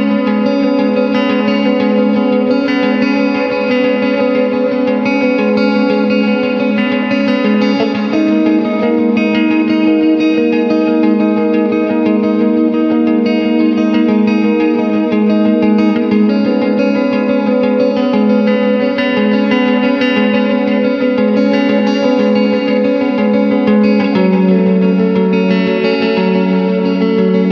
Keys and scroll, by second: 5.8 ctrl+y, 6.6 ctrl+space, 10.2 Return, 16.8 space, 17.7 ctrl+w, 18.0 Return, 19.9 c, 21.0 Return, 21.6 ctrl+KP_Add, 22.2 alt+i, 22.4 alt+a, 23.2 shift+F2, 23.7 ctrl+space, 24.4 space, 24.7 w, 25.6 ctrl+alt+d, 25.9 Return, 26.6 shift+F2.